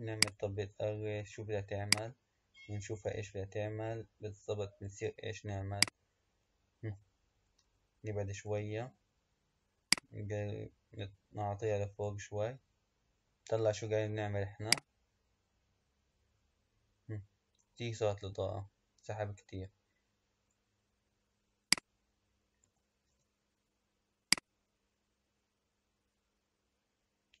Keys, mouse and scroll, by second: 0.3 click, 1.9-5.0 drag, 5.7 click, 10.0 click, 14.6-17.9 drag, 21.8-27.4 drag.